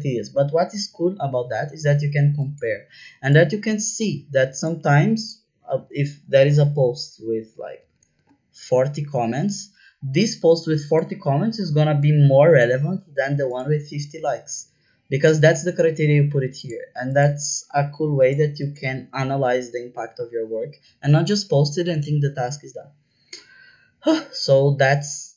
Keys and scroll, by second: 6.8 Up, 7.4-8.3 typing.